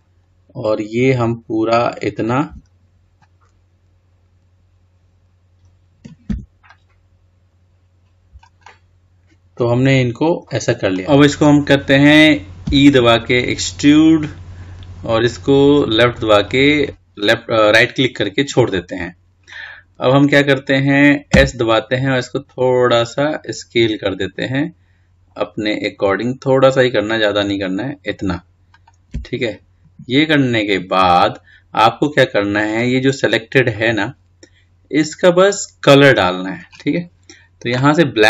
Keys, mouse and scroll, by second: 2.3 ctrl+z, 5.4 middle click, 6.1 c, 8.4-10.7 middle drag, 10.7-13.4 scroll up 2, 30.3-31.0 scroll down 2, 31.0-32.3 scroll up 1, 32.3-32.9 scroll down 2, 32.9-33.6 scroll up 3, 33.6-36.7 middle drag.